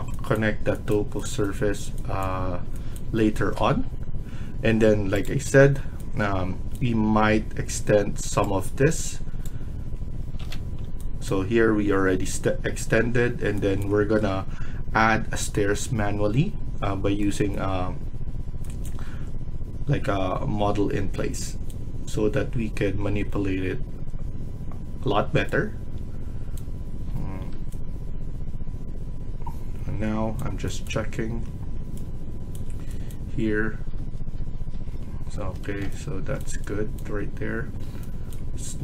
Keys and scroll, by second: 10.3 ctrl+z, 33.9 Tab, 34.3 Tab, 34.6 Tab, 35.3 Escape, 35.6 Escape.